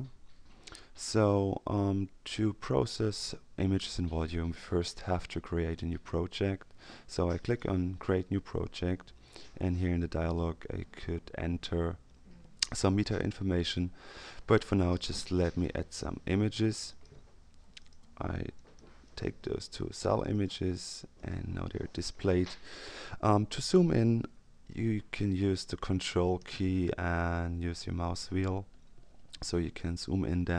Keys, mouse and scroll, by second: 7.4 click, 9.7 click, 15.4 click, 16.8 click, 17.8 click, 19.0 ctrl+click, 20.2 click, 21.1 click, 27.6-29.0 ctrl+scroll up 2, 29.0-29.6 ctrl+scroll up 1.